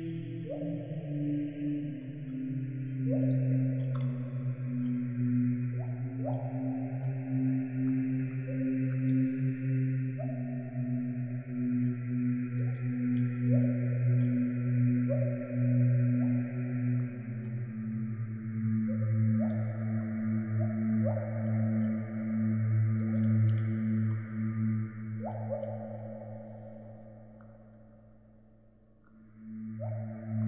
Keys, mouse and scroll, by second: 0.2 click, 1.6 click, 2.8 click, 3.0 click, 3.2 click, 6.5 middle click, 6.9 click, 7.3 click, 7.7 click, 8.4 click, 9.4 click, 9.9 click, 10.1 click, 10.3 click, 10.6 click, 11.6 click, 11.7 KP_Decimal, 11.7 middle click, 12.0 middle click, 12.0 scroll up 2, 12.2 click, 12.8 click, 13.1 middle click, 14.0 click, 14.1-14.4 scroll up 10, 14.4-14.9 scroll down 4, 14.7 click, 15.3 click, 15.9 middle click, 16.0 scroll down 2, 16.4 shift+h, 17.0 click, 17.5 click, 17.8 Tab, 18.2 g, 18.6 click, 18.6 e, 18.8 e, 19.2-19.6 drag, 19.6 ctrl+p, 20.3 ctrl+click, 20.4 click, 20.5 click, 20.7-21.1 right drag, 21.5 click, 22.4 click, 22.8 middle click, 23.4 click, 24.2 i, 25.1 click, 26.0 click, 26.6 i, 26.8 click, 27.1 g, 27.5 shift+d, 28.0 click, 28.0 scroll up 3, 28.7 space, 28.8 click, 28.9 right click, 29.3 click, 30.0 n, 30.1 click, 30.1 n.